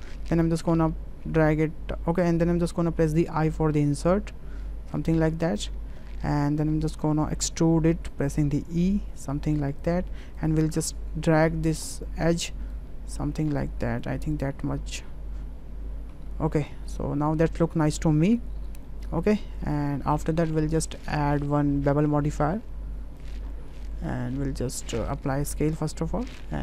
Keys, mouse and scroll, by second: 3.1 i, 8.3 e, 11.5 2, 12.7-14.0 drag, 14.3 click, 16.1 Tab, 16.3 ctrl+z, 16.8 ctrl+z, 17.9 click, 18.2 Tab, 18.9-19.7 drag, 21.6-23.3 drag, 25.2 ctrl+a.